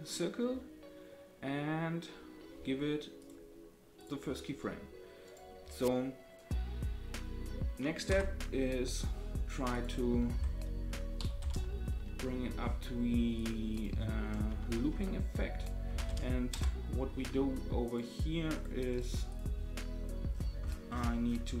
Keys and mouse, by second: 3.3 right click, 8.1 Right, 9.7-13.4 drag, 13.7-17.0 drag, 14.9 Tab, 17.9 right click, 19.0 right click.